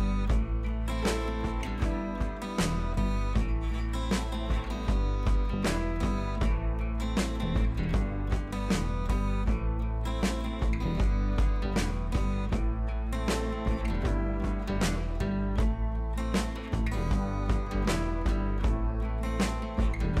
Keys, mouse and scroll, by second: 0.2-6.2 alt+drag, 6.6 click, 9.1 ctrl+t, 9.9-11.5 drag, 11.9 ctrl+t, 12.5-13.8 drag, 14.3 alt+click, 15.4 ctrl+t, 15.7 right click, 16.3-20.2 drag, 17.3-20.2 drag.